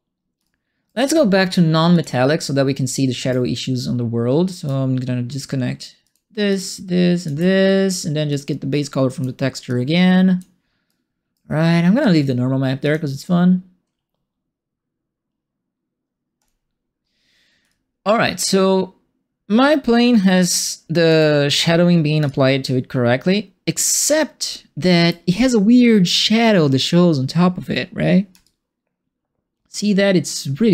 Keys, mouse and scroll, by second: 0.4 alt+right click, 1.9 click, 2.9 right click, 6.0 alt+click, 6.4 alt+click, 7.1 alt+click, 8.2 click, 9.6 click, 10.8 right click, 12.8 click, 16.3 click, 17.6-21.0 alt+drag, 22.2-25.0 alt+drag, 28.4-30.7 alt+drag.